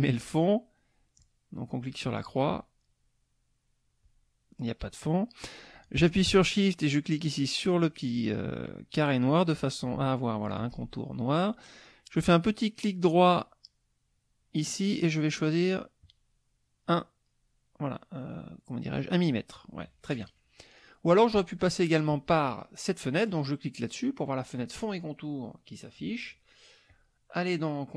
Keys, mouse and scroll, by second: 1.2 click, 1.7 click, 7.8 shift+click, 14.2 right click, 16.0 click, 18.0 right click, 19.5 click, 20.6 click, 22.1 click, 24.2 click, 26.8 click.